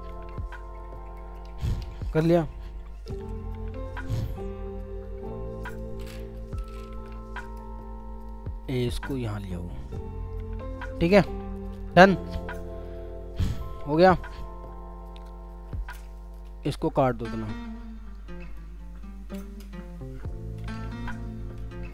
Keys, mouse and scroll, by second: 4.3 shift+click, 6.4 Return, 6.6 space, 8.3 alt+click, 20.3-21.1 typing.